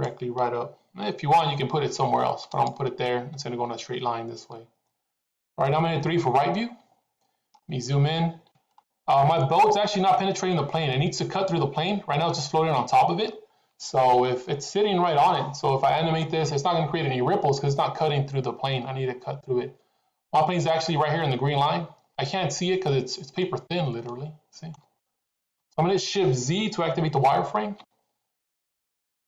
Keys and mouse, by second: 1.2 g, 6.5 KP_3, 9.3-9.8 shift+middle drag, 23.3-24.7 middle drag, 25.4 KP_3.